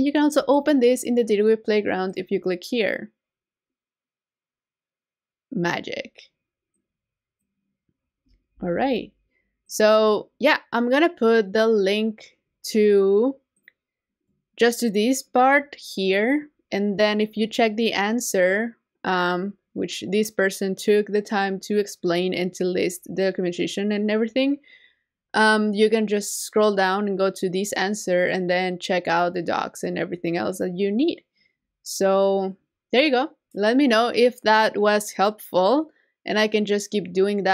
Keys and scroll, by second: 8.5 super+w.